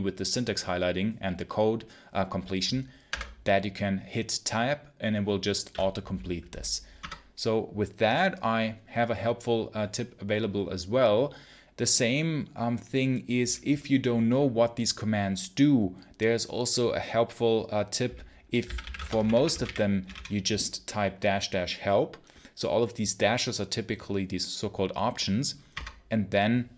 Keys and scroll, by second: 2.9 Tab, 6.9 Return, 18.3-20.4 typing, 25.6 Return.